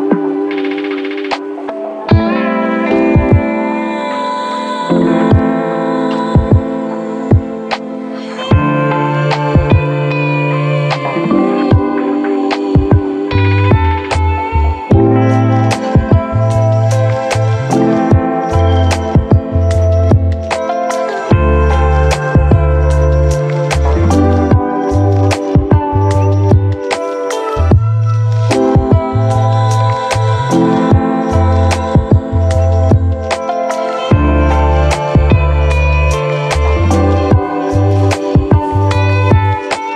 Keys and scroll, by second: 9.9 ctrl+1, 19.4 ctrl+z.